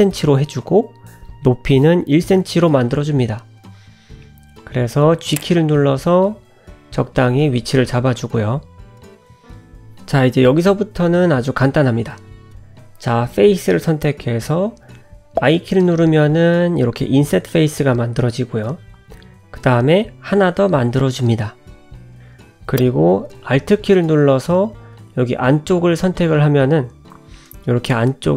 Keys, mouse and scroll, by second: 0.3 click, 1.9-2.6 scroll up 6, 2.6 middle click, 3.1 g, 4.0-4.4 scroll down 5, 4.6 shift+middle click, 7.9 middle click, 8.3-8.7 scroll up 1, 8.7 KP_Decimal, 9.4-9.9 scroll down 2, 9.9 middle click, 10.7 Tab, 12.7 click, 13.5 click, 15.9 i, 26.6 alt+click.